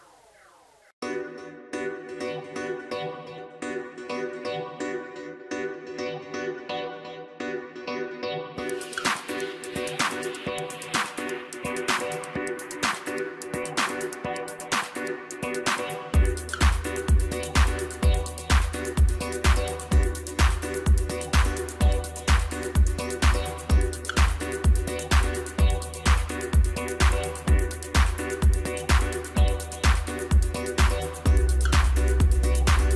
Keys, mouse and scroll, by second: 0.7 p, 2.9 click, 3.5 Tab, 4.0-4.7 middle drag, 4.7 click, 5.2-8.2 middle drag, 8.8 click, 9.4-10.9 scroll down 1, 10.9-14.0 drag, 19.5 click, 20.8-23.6 drag, 23.6 scroll down 3, 23.9-26.9 middle drag, 26.9-27.4 scroll up 2, 27.4-29.7 middle drag, 29.7 click, 30.2 middle click, 30.8-31.1 scroll up 1, 31.1 Tab, 32.4 2.